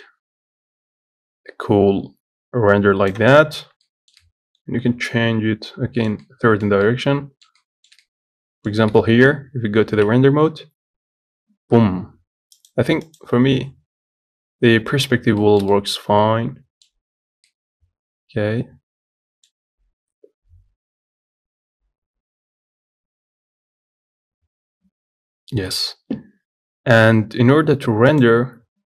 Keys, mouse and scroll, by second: 0.0-2.7 drag, 4.2-9.3 shift+middle drag, 9.3 z, 10.4 ctrl+s, 13.2-15.8 drag, 15.8-27.6 shift+middle drag.